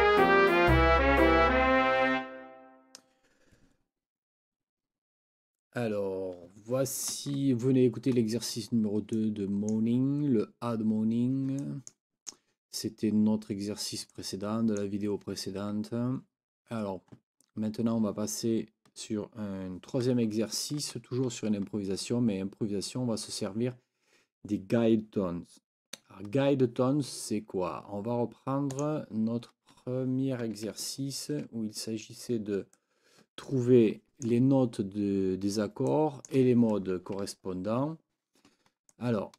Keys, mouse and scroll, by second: 9.1 click, 11.6 click, 14.1 click, 28.8 click, 30.9 ctrl+scroll up 2, 32.7-34.4 drag, 35.9 click, 37.5 ctrl+scroll up 2, 38.9 click, 39.2 click, 39.3 click.